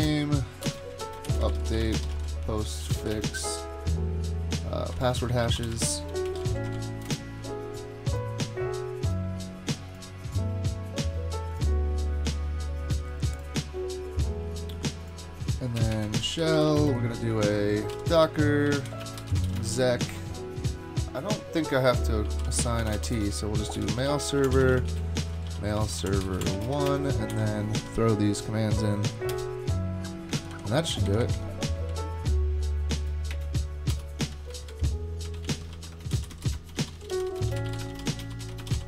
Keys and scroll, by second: 0.0-3.6 typing, 4.7-7.8 typing, 15.8-20.1 typing, 22.0-26.9 typing, 27.3 alt+c, 28.0 Down, 29.3 Return, 29.4 super+v, 30.4 super+Left, 30.5 super+Left, 31.1 Up, 31.2 Up, 31.3 Up, 31.9 Down, 33.3 space, 33.9 BackSpace, 34.3 Up, 34.5 Right, 34.7 Right, 35.1-38.8 typing.